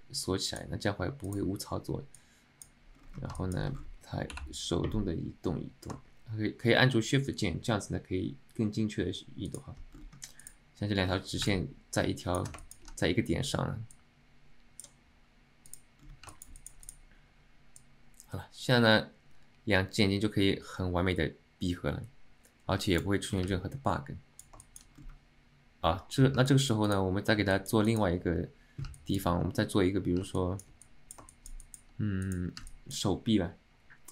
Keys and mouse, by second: 14.1-15.1 drag, 16.4 alt+shift+middle click, 16.7 alt+middle click, 18.0-23.2 drag, 23.6-24.6 alt+middle drag, 24.7 alt+shift+middle drag, 26.6 alt+middle click, 27.6 middle click, 28.0 alt+shift+middle drag, 29.1 alt+middle click, 30.5-30.8 alt+shift+middle drag, 31.0-31.3 alt+middle drag, 31.4 shift+middle click, 31.7 middle click, 32.8 alt+middle click.